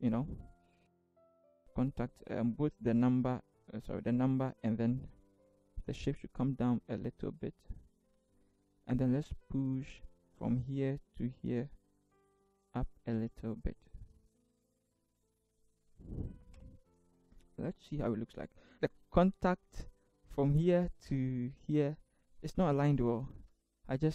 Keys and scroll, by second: 5.9 Down, 6.2 Down, 6.4 Down, 7.1 Down, 12.3 shift+Up, 12.5 shift+Up, 12.6 shift+Up.